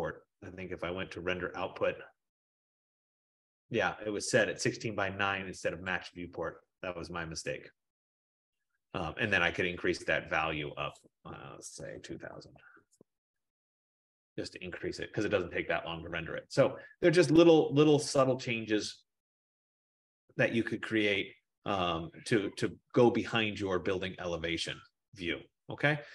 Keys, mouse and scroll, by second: 1.3 click, 2.1-3.2 scroll, 3.9 click, 6.0 click, 11.1 click, 11.8-12.8 typing, 12.5-16.1 drag, 12.9 Tab, 18.5-23.5 drag, 18.7 F15.